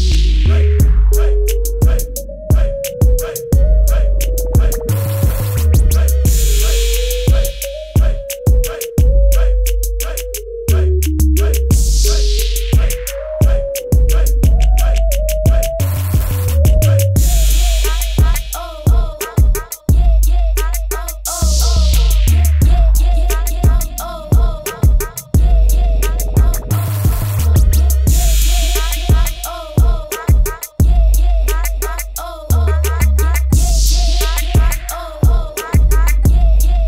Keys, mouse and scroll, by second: 2.3 b, 2.7 right click, 3.7 click, 4.5 click, 6.9 Return, 7.1 click, 11.6-12.0 typing, 12.3 click, 15.8 KP_2, 18.0 click, 21.5 x.